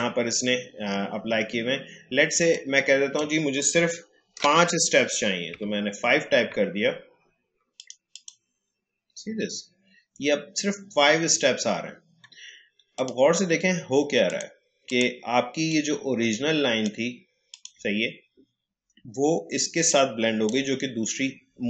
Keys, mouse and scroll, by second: 2.5-5.5 drag, 5.5 5, 7.7 click, 12.9-21.6 drag.